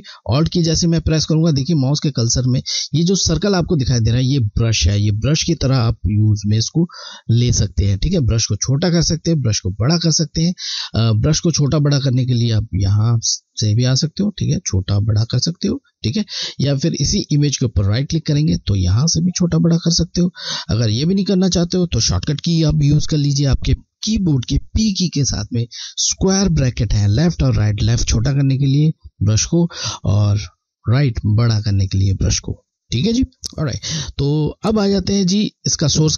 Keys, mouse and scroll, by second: 12.1 Left, 12.1 click, 15.9 click.